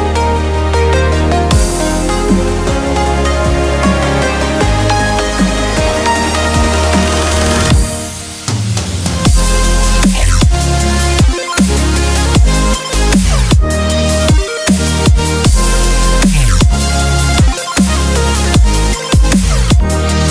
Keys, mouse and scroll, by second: 1.8-5.5 drag, 7.7-9.8 drag, 7.7-9.3 middle drag, 10.5 shift+g, 10.8 click, 13.3 middle click, 13.9-15.0 drag, 15.4-17.1 drag, 18.7-20.3 middle drag.